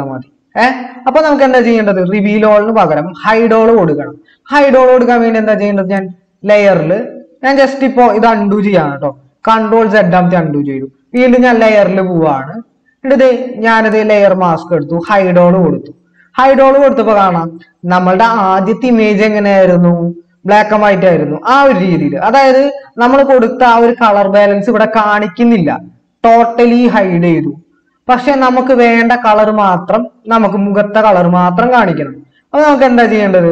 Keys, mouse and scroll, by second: 9.6 ctrl+z.